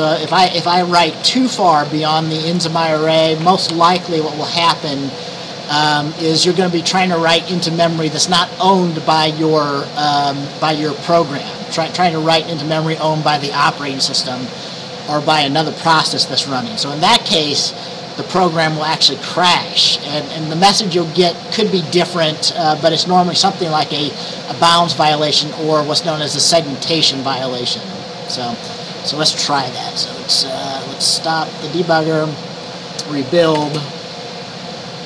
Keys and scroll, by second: 0.4 Right, 0.6 Right, 0.7 Right, 1.1 Right, 1.2 Right, 1.5 Right, 1.7 Right, 1.8 Right, 2.3-2.7 typing, 3.8 ctrl+s, 33.6 ctrl+b.